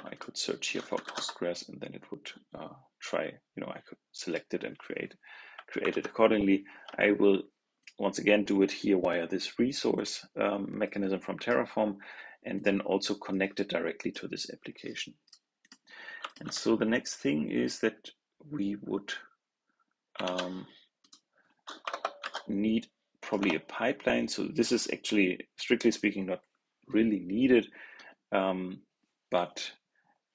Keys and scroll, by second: 5.8 super+Tab, 20.1 super+c, 22.1 super+v.